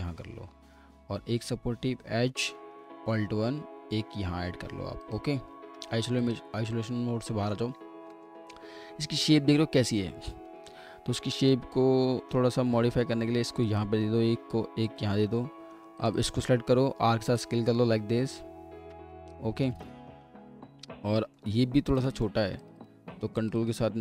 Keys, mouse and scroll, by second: 0.2 scroll down 1, 0.5 middle click, 3.0 alt+1, 7.3 middle click, 7.7-8.1 scroll down 1, 8.1 middle click, 10.0-10.4 scroll up 1, 10.4 w, 11.2 middle click, 12.6 alt+1, 15.3 w, 16.1 double click, 16.8 r, 20.9 typing, 20.9 scroll up 1, 21.2 middle click, 22.6 ctrl+click, 22.8 ctrl+double click, 23.4 ctrl+click.